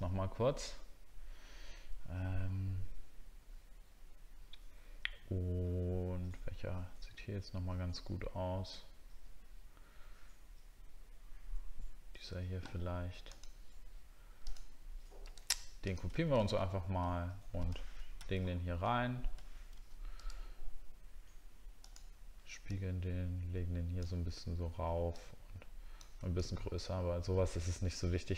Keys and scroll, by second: 16.4 alt+Tab.